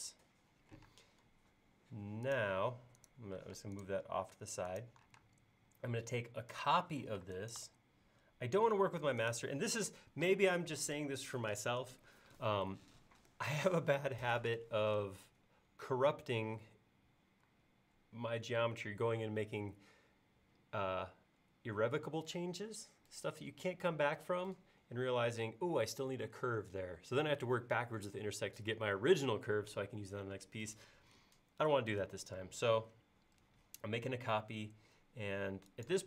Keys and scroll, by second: 0.9 space, 3.5 m, 5.3 space, 7.2 m.